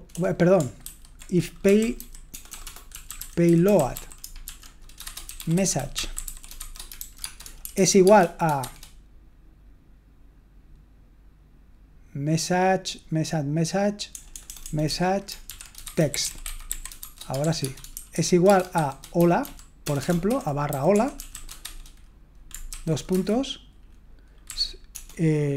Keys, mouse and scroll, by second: 0.0-0.1 typing, 0.8 ctrl+w, 1.4-9.1 typing, 14.3-22.7 typing, 23.1 Return.